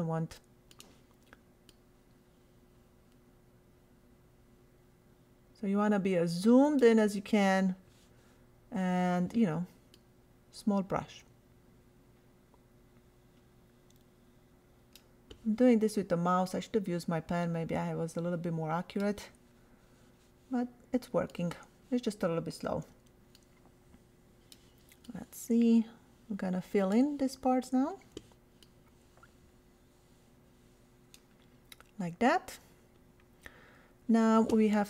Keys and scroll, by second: 22.6 ].